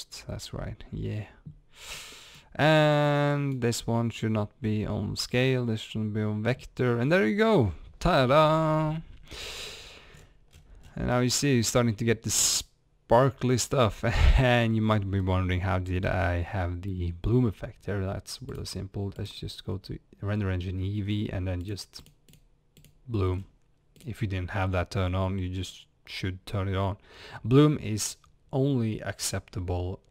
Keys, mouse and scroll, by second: 2.3-3.5 drag, 9.4 scroll up 1, 10.5 scroll down 1, 11.1-13.0 middle drag, 13.1-21.6 middle drag, 14.8-15.3 scroll up 2, 21.6 click, 22.0 click, 22.3 click, 23.4 scroll down 1, 24.6 scroll up 1.